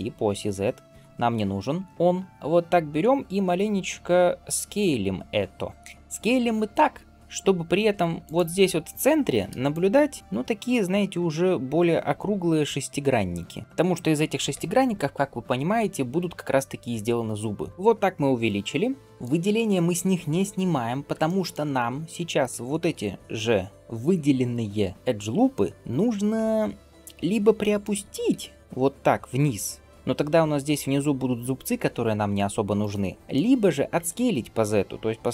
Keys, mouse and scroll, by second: 9.5-13.6 drag, 13.6 right click, 13.6 d, 17.7 scroll down 1, 19.0 middle click, 19.3 scroll down 1, 21.1 shift+middle click, 21.6 middle click, 22.4 shift+scroll down 1, 22.5 shift+middle click, 25.4 scroll up 2, 26.5 scroll down 1, 27.4 middle click, 27.8 g, 33.1 middle click.